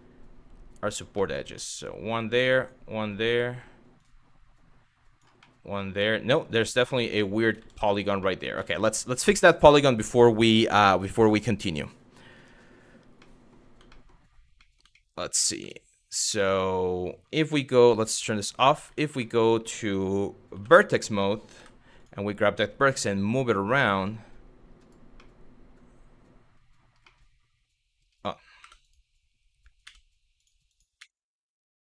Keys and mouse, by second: 0.9 middle click, 1.4 click, 3.6 click, 5.1-6.1 middle drag, 6.6 middle click, 7.2 ctrl+z, 7.4 ctrl+z, 7.9 middle click, 9.1 middle click, 9.5 middle click, 12.9 middle click, 13.5 shift+middle click, 14.2 middle click, 14.6 shift+middle click, 15.2 Tab, 15.9-16.5 middle drag, 18.1 click, 18.5 Tab, 18.9 middle click, 20.2 1, 21.2 w, 21.6 click, 22.5 g, 24.9-26.2 middle drag, 26.7-27.7 middle drag, 28.2 3, 28.4 click, 29.5 x, 30.6 x.